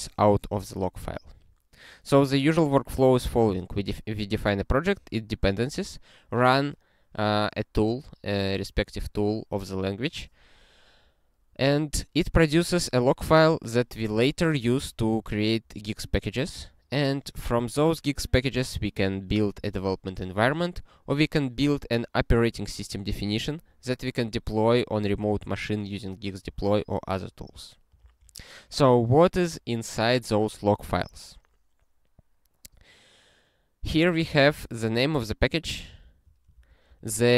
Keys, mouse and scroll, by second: 24.1 u, 25.8 ctrl+/, 28.0 ctrl+a, 34.4 ctrl+f, 34.6 ctrl+f, 34.8 ctrl+f, 36.0 ctrl+alt+@, 36.5 ctrl+g, 37.0 alt+f.